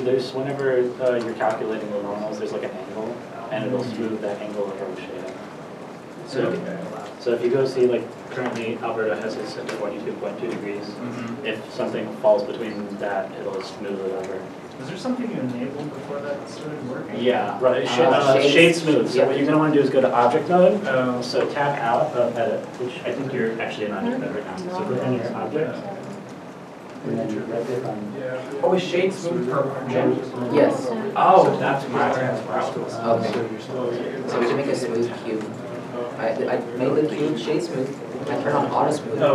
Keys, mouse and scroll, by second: 12.3 middle click, 12.3 scroll down 1, 12.7 g, 13.4 shift+middle click, 13.7-14.7 typing, 14.8 Return, 16.7 shift+middle click, 18.2 space, 18.8 s, 18.9 h, 27.0 shift+middle click, 27.6 Tab, 28.1 Tab, 28.9 Tab, 29.2 Tab, 30.2 Tab, 30.5 Tab, 34.9 Tab, 35.6 Tab.